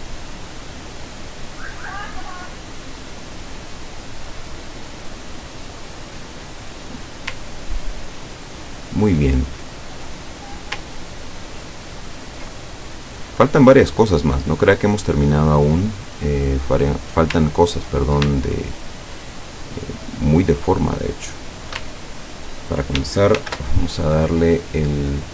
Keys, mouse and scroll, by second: 2.5 click, 4.0-6.0 drag, 7.8-8.3 ctrl+scroll down 4, 8.6-9.1 ctrl+scroll down 4, 9.6-10.7 ctrl+middle drag, 11.0-11.4 ctrl+scroll down 2, 11.6 ctrl+scroll up 2, 12.1 ctrl+scroll up 2, 12.8 ctrl+click, 13.6-15.7 drag, 17.5 ctrl+scroll up 2, 19.1 shift+click, 20.0 shift+click, 21.2 shift+click, 22.3 ctrl+scroll down 2, 23.4 ctrl+shift+f.